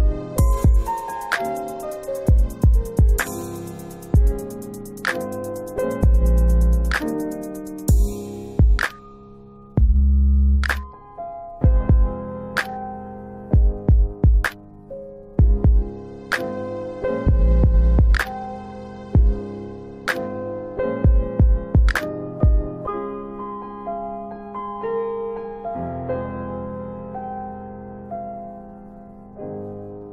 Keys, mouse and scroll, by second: 2.2 shift+click, 3.6 alt+middle click, 7.5 scroll up 1, 8.7 shift+click, 9.9 alt+w, 10.5 alt+w, 17.0 alt+click, 18.1 alt+click, 20.4 click, 23.3 alt+w, 23.8 alt+w, 24.2 scroll down 2, 24.8 alt+middle click, 25.5 middle click, 26.2 alt+middle click, 26.6 alt+middle click, 27.6 alt+w, 28.2 alt+w, 28.4-29.0 scroll down 3, 29.0 middle click, 29.3-29.7 scroll down 2, 29.8 middle click.